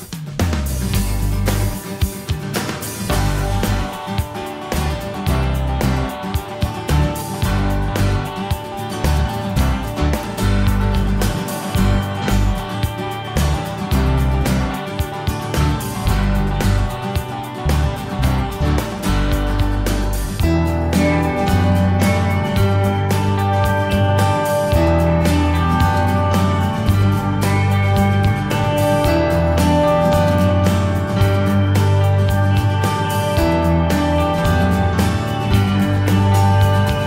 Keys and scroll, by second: 6.7-9.6 typing.